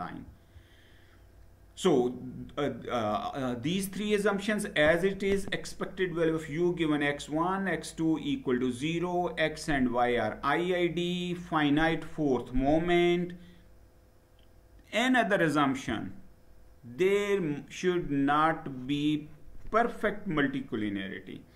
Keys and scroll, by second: 0.1 Down.